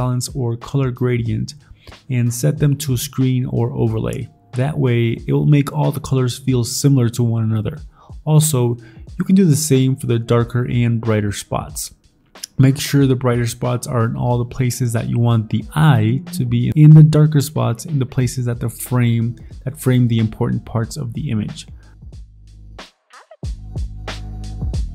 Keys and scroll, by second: 1.8 ctrl+j, 2.2 ctrl+i, 2.8 ctrl+i, 4.4 b, 4.8 0, 6.6 ctrl+i, 6.8-8.9 typing, 10.4-11.3 typing, 11.5 ctrl+z, 12.8-14.2 typing, 16.3 v, 20.0-21.8 typing, 23.9 v, 24.8 ctrl+z.